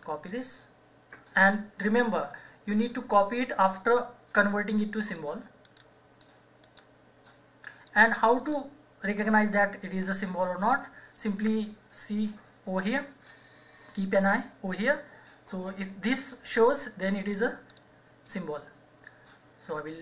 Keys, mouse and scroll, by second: 5.1 click, 5.7 right click, 6.2 click, 6.6 right click, 7.9 click, 8.4 right click, 9.2 click, 17.7 click, 17.7 click.